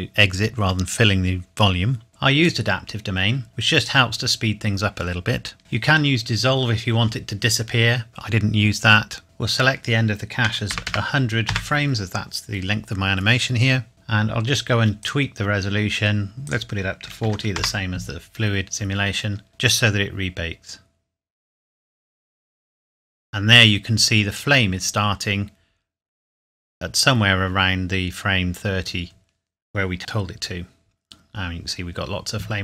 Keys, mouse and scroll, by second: 2.5 click, 5.6 scroll down 1, 8.9-9.5 scroll down 1, 9.5 click, 10.5 KP_1, 10.7 KP_0, 11.5 KP_Enter, 13.9-14.7 scroll up 1, 15.0 click, 17.3 KP_4, 17.6 KP_Enter, 19.5 space.